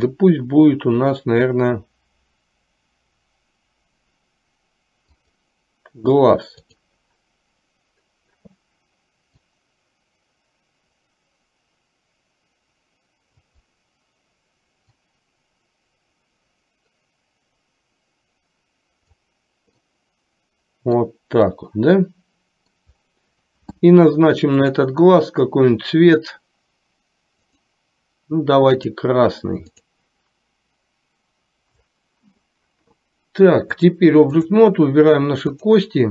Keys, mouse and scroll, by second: 0.2-5.9 drag, 6.8 click, 9.9-13.7 drag, 15.0-19.3 drag, 20.0-21.3 middle drag, 21.7 scroll up 1, 21.8-23.0 middle drag, 24.7 click, 27.7-28.8 drag, 34.0 click.